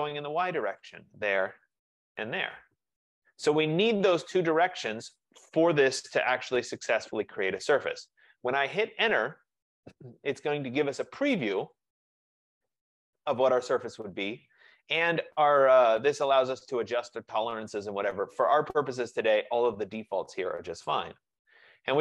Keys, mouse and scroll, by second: 0.9 click, 1.9 shift+click, 9.4 Return, 11.8 click, 20.9 click.